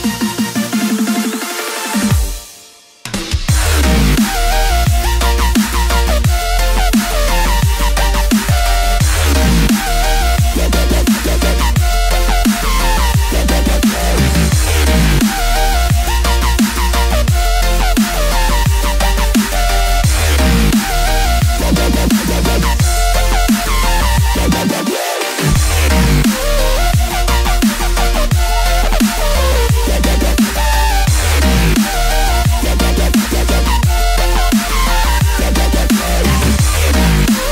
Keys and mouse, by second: 10.9 click, 12.3 right click, 13.4 shift+click, 14.3 shift+click, 15.0 shift+click, 16.0 shift+click, 16.7 shift+click, 17.7 shift+click, 18.4 shift+click, 19.5 shift+click, 20.7 shift+click, 21.5 shift+click, 22.3 middle click, 24.9 g, 33.6 click, 34.8 shift+click, 35.4 shift+click, 36.1 shift+click, 36.7 shift+click, 37.4 shift+click.